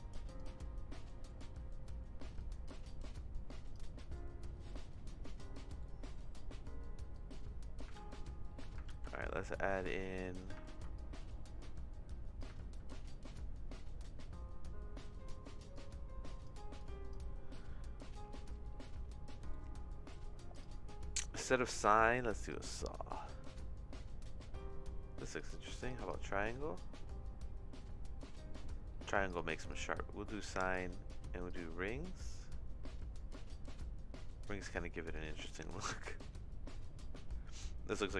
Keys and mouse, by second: 2.4 click, 3.0 click, 4.1 middle click, 5.8 middle click, 7.1 click, 8.0 ctrl+z, 8.1 click, 9.0 ctrl+z, 9.1-10.4 drag, 10.8 ctrl+z, 10.9-12.4 drag, 12.8 ctrl+z, 13.7 middle click, 15.7 click, 16.8 click, 19.5 middle click, 20.5 click, 21.5-22.5 drag, 25.3 click, 29.2 click, 30.6-31.6 drag, 34.6 click.